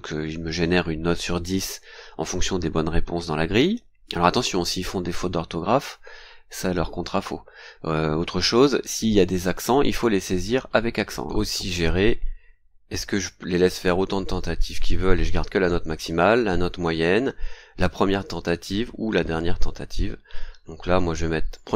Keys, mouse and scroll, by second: 11.3 click, 21.5 click.